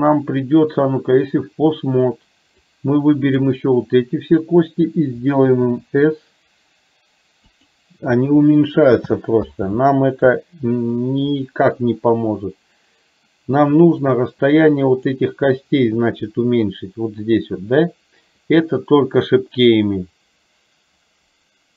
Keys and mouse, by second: 1.3 middle click, 2.8-3.4 drag, 9.8 ctrl+z, 14.2-15.2 drag.